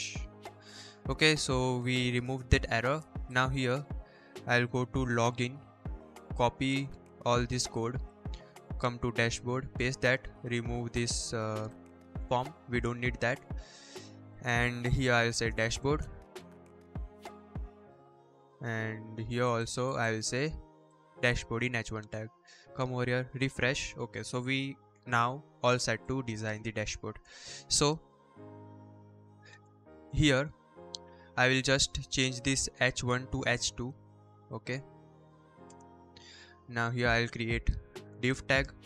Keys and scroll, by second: 6.7 ctrl+c, 8.9 ctrl+v, 12.0 BackSpace, 12.6 ctrl+s, 14.8-17.5 typing, 17.5 Escape, 19.9 ctrl+c, 20.9 ctrl+v, 21.2 ctrl+s, 29.3 Return, 29.4 Return, 29.6 Return, 30.1 BackSpace, 30.9 Up, 31.1 Right, 31.3 Right, 31.6 Up, 32.8 BackSpace, 33.1 2, 33.2 Right, 33.4 Right, 35.4 BackSpace, 35.5 2, 37.5-38.8 typing.